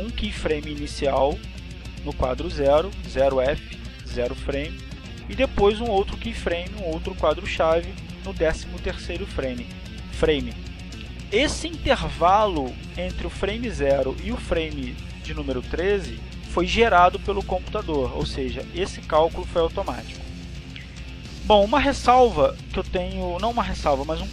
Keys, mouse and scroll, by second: 1.4 click, 3.1 click, 8.9-9.9 drag, 15.4-19.7 drag, 20.4-22.1 drag, 22.9 click.